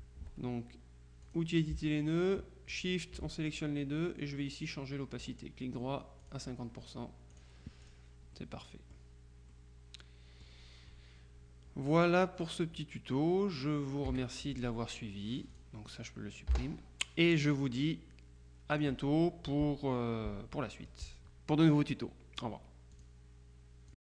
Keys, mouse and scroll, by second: 1.3 click, 2.8 shift+click, 5.3 right click, 6.3 click, 7.4-8.5 drag, 9.6-11.0 drag, 14.1 KP_Subtract, 15.6 click, 16.6 Delete, 18.8 click, 23.1 click, 24.0 click.